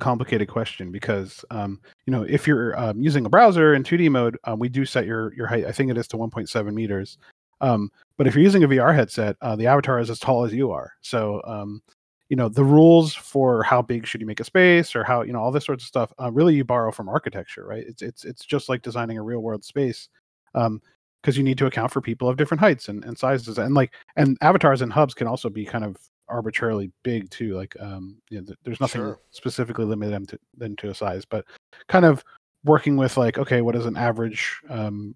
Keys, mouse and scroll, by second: 0.3 middle click, 3.7 scroll down 1, 5.8 middle click, 8.6 middle click, 12.0 scroll up 1, 12.8 middle click, 14.5 scroll down 1, 16.8 shift+z, 17.4 middle click, 19.0 scroll up 1, 19.8 middle click.